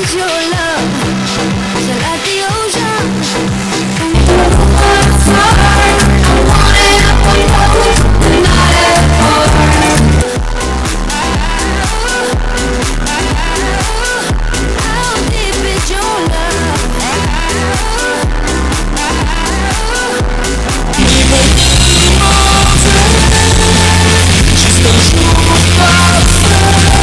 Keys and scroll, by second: 10.3 Page_Down.